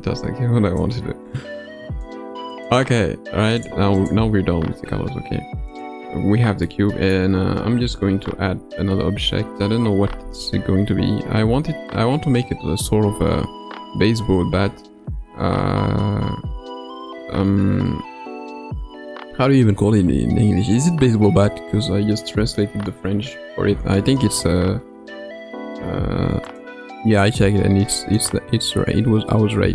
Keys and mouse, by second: 2.6-4.0 drag, 5.7 click, 6.6-7.2 middle drag, 8.1 shift+Tab, 8.1 shift+a.